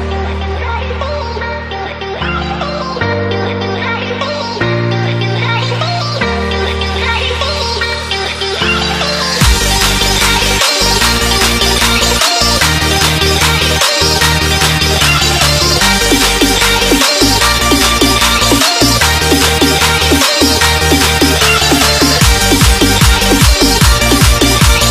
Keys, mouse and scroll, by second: 0.2 click, 4.7 click, 9.7 click, 10.2 e, 11.2 click, 11.8 scroll down 1, 12.9 click, 15.4 Return, 16.6 click, 21.0 right click, 22.2 click, 24.0 ctrl+t, 24.6 click.